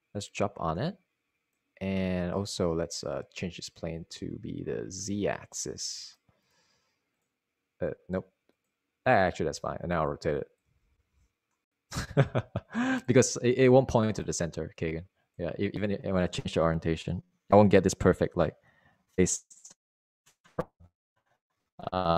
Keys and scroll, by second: 0.4 e, 12.9 r.